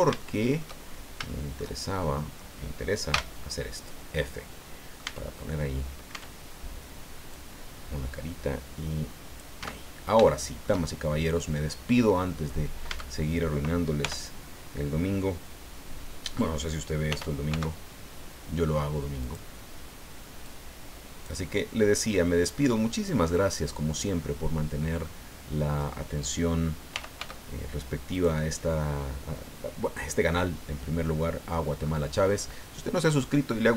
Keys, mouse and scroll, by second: 0.2 shift+middle click, 0.9 shift+scroll up 1, 1.3 shift+middle click, 2.0 shift+middle click, 3.1 f, 3.7-4.0 scroll down 2, 4.2 click, 5.1 Tab, 5.5 click, 5.6 right click, 6.1 Tab, 7.3-9.6 drag, 9.7 Tab, 9.8-10.2 scroll down 1, 10.3 shift+middle click, 11.5-12.7 middle drag, 12.9 Tab, 14.0 l, 17.1 r, 17.5 x, 19.2 click, 20.5 click, 23.1-24.2 drag, 24.2-26.0 middle drag, 26.9 r, 27.2 x, 28.2 click, 28.6-31.7 middle drag, 31.8-32.2 scroll up 2.